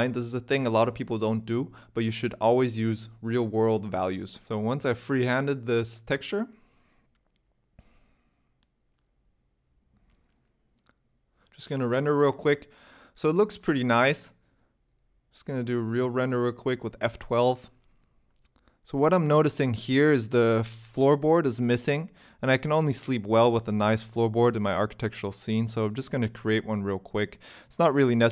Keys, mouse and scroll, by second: 4.4 click, 4.5 click, 5.7 click, 7.7-8.1 scroll down 4, 8.5-9.1 scroll down 3, 8.7 z, 9.5 shift+middle click, 11.3 scroll up 2, 11.3 n, 11.3 t, 11.9 scroll down 1, 12.1 shift+middle click, 13.0 z, 14.5 ctrl+s, 15.0 F12, 21.8 click, 22.3 Tab, 22.7 shift+middle click, 22.7-23.1 scroll up 4, 23.5 ctrl+r, 23.5 scroll up 1, 24.9 3, 25.3 alt+click, 26.0 e, 26.4 s, 28.2 Tab.